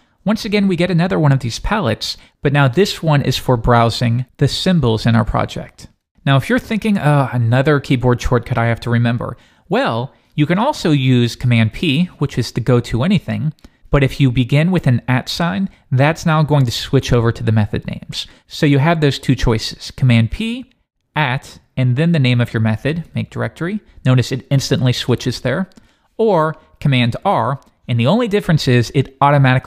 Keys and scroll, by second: 11.4 super+p, 15.4 shift+@, 18.9 Escape, 20.1 super+p, 25.1 Return, 27.3 super+r.